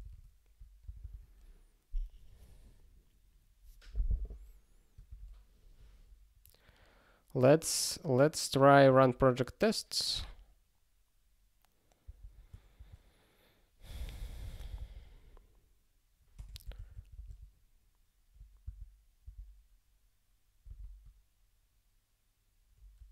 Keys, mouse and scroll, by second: 0.8 super+b, 5.1 ctrl+a, 6.2-6.7 scroll down 1, 8.9 click, 8.9 click, 12.0 Return, 12.7 shift+9, 16.5-17.4 typing, 18.7 Return, 19.2 ctrl+e.